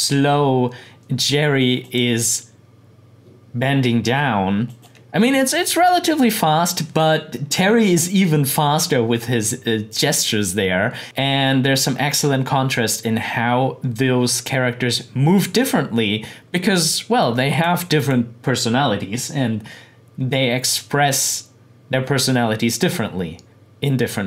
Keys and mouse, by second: 1.8 click, 4.7 click, 11.0 click, 17.2 click.